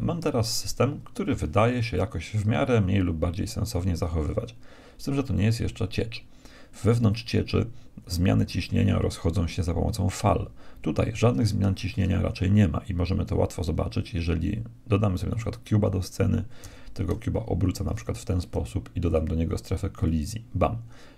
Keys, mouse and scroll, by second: 11.7 shift+a, 16.7 r, 19.1-21.1 drag.